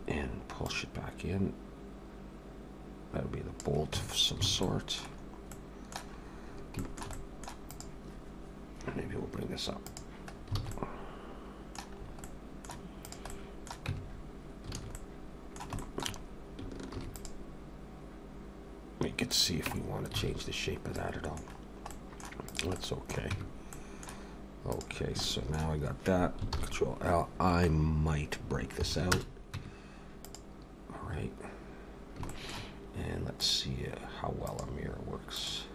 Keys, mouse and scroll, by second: 0.7 click, 4.0 Tab, 4.2-4.5 scroll down 3, 4.5 alt+a, 4.6 middle click, 5.1 scroll down 1, 5.5 middle click, 6.1-6.7 scroll up 5, 6.8 shift+middle click, 7.1 middle click, 7.7 click, 9.9 click, 10.3 scroll down 4, 10.6 alt+a, 10.7 middle click, 11.9 scroll up 3, 12.2 middle click, 13.0 click, 13.3 middle click, 13.9 Tab, 14.0-14.7 scroll up 2, 14.8 alt+a, 14.9 middle click, 15.8 shift+middle click, 16.1-16.6 scroll up 1, 16.9 ctrl+r, 19.7 Tab, 19.8-20.1 scroll down 3, 20.2 alt+a, 20.6-20.9 scroll down 1, 21.0 middle click, 21.6 scroll down 1, 21.9 middle click, 22.5 click, 22.8 middle click, 23.3 Tab, 23.7 middle click, 24.7 click, 25.2 shift+middle click, 26.5 ctrl+l, 27.3-27.8 scroll down 5, 28.8 p, 29.6 Tab, 30.2 click, 32.3 shift+middle click, 33.3 click, 34.5 click, 35.3 click.